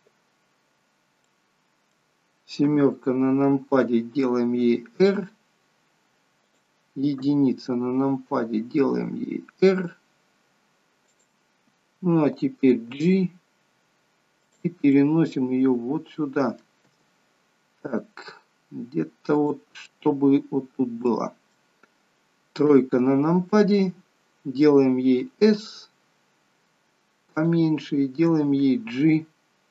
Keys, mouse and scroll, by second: 1.2 middle click, 2.6 KP_7, 4.6 r, 7.2 KP_1, 8.9 r, 12.7 g, 15.0 middle click, 16.9 g, 19.8 middle click, 21.1 middle click, 22.8 KP_3, 23.6 scroll up 4, 25.2 s, 28.3 g.